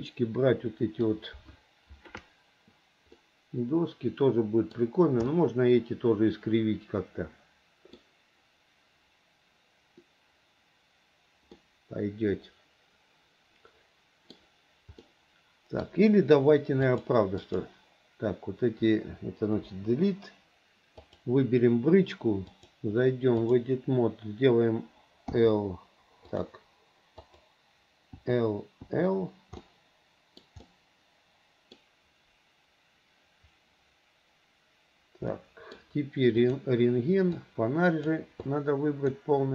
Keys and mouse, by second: 3.4-5.0 middle drag, 5.5-8.1 middle drag, 11.7-14.6 middle drag, 15.2 middle click, 17.0 click, 19.8 Delete, 21.1 click, 22.7-23.7 drag, 25.5 l, 28.4 click, 29.8 click, 30.8 click, 30.9 middle click, 31.8 click, 35.5 middle click, 36.7 click, 38.6 click.